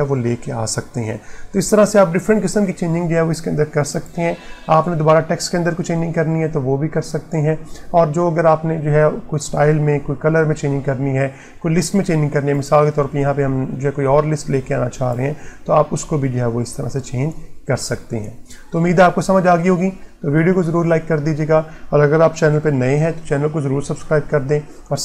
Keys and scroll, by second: 0.8 Print.